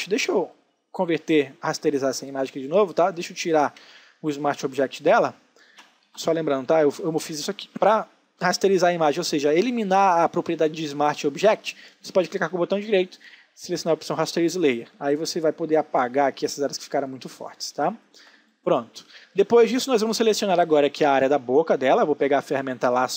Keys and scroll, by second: 3.9 space, 16.8 space, 21.0 l.